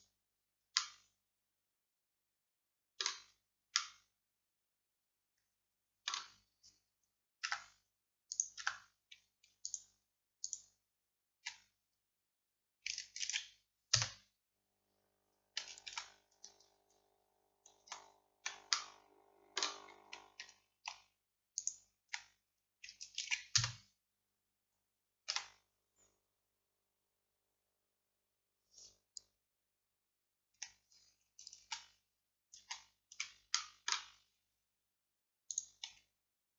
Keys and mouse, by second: 0.8-7.5 drag, 7.5 Tab, 8.4-13.3 drag, 8.7 Tab, 13.3 shift+d, 16.0 ctrl+z, 18.8-21.0 drag, 21.6-23.6 drag, 23.3 shift+d, 25.4 p, 31.7 ctrl+z, 33.6-36.5 drag.